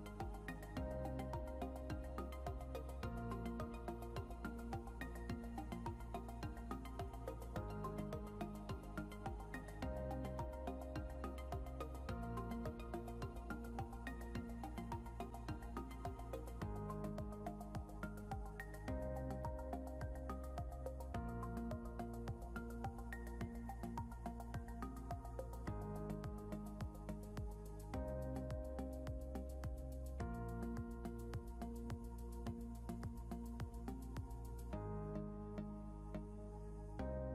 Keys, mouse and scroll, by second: 0.9 click, 3.4 scroll up 1, 4.0 click, 6.5 scroll up 1, 7.1 click, 12.4 scroll down 1, 14.5 click, 17.0 scroll up 1, 17.5 click, 36.2 scroll down 1.